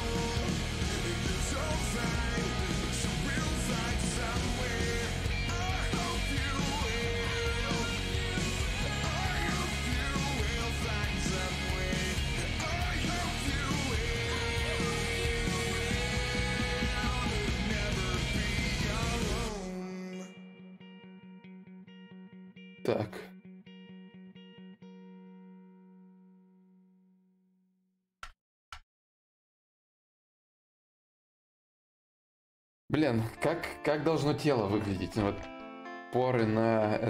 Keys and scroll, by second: 16.9 ctrl+z, 34.9 alt+Tab.